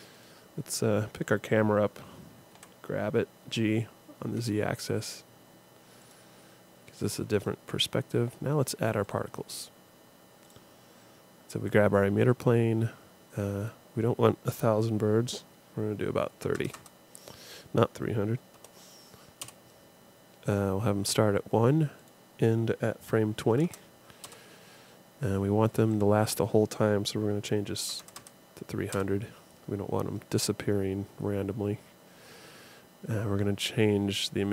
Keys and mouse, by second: 0.1-1.9 right drag, 2.5 g, 7.4-12.3 drag, 13.6-15.5 drag, 16.7 KP_0, 22.0-23.7 drag, 25.9-27.7 drag, 28.2 KP_0, 32.9-34.5 middle drag.